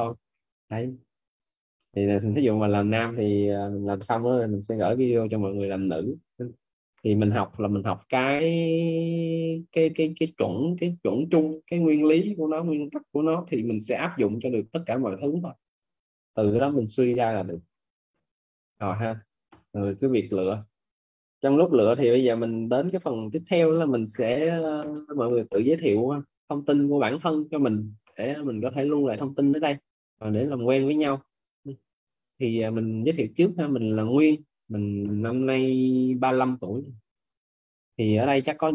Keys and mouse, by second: 31.9 click, 33.1 click, 34.2 click, 37.0 click.